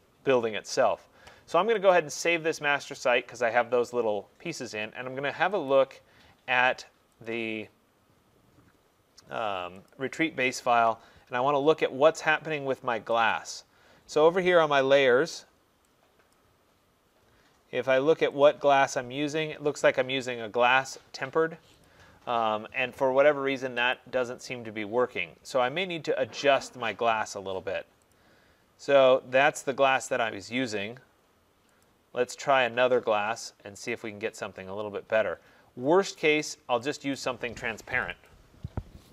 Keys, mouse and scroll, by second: 2.0 click, 3.1 click, 5.7 click, 10.2 click, 13.4 click, 16.4 click, 19.1 click, 21.9 click, 24.0 click, 26.9 middle click, 28.2 click, 31.9 click, 33.9 click, 36.2 click, 37.0 click, 37.2 click, 38.1 click, 38.3 click.